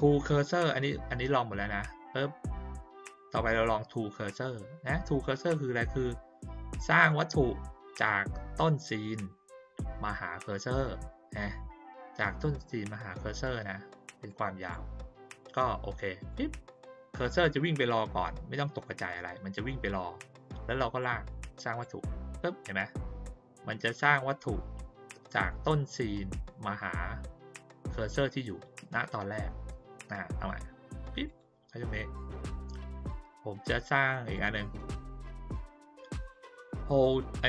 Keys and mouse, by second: 7.0 click, 14.2-14.7 drag, 16.2 click, 21.0 click, 31.2 click, 34.3 click.